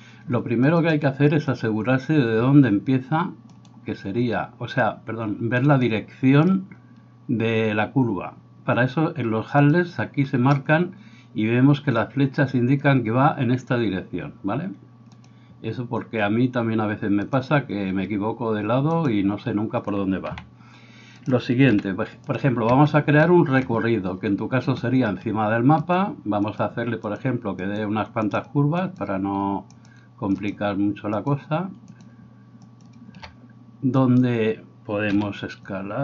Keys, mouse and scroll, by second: 3.5 right click, 18.9 right click, 20.4 s, 21.7 r, 23.3-25.8 middle drag, 25.8 ctrl+click, 25.9-27.2 ctrl+middle drag, 26.5 ctrl+click, 27.2 ctrl+click, 27.8-34.0 ctrl+middle drag, 28.3 ctrl+click, 29.9 ctrl+click, 32.0 ctrl+click, 34.0 right click, 34.2-36.0 middle drag, 35.1 r.